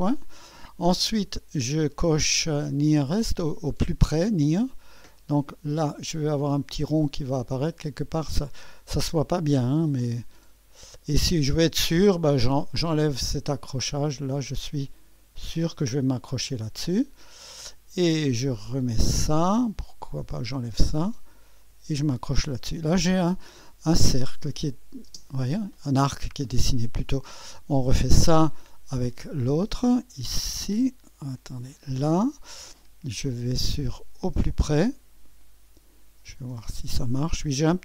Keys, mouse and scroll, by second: 4.0 click, 8.3-8.9 scroll up 2, 8.9-9.7 scroll down 2, 12.9 click, 16.3 click, 19.1 click, 20.3 click, 20.9 click, 22.0-23.4 drag, 24.0 space, 25.1 typing, 28.0 click, 31.6 click, 34.8 click.